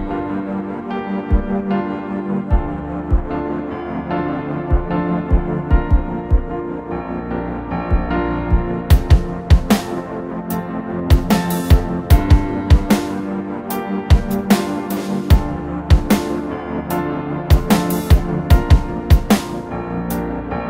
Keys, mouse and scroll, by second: 7.0 scroll up 1, 11.3 double click, 15.5-18.9 typing, 19.3 double click.